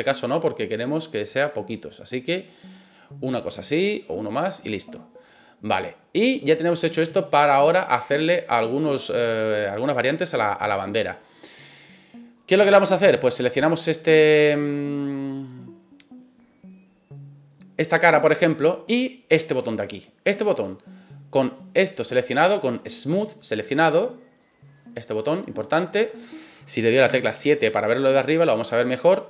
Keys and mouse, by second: 4.5 click, 5.6-9.4 middle drag, 10.1 middle click, 12.6 click, 13.6 right click, 20.7 click, 21.6-24.5 drag, 24.7 click, 25.0 click, 25.8 middle click, 27.1 KP_7.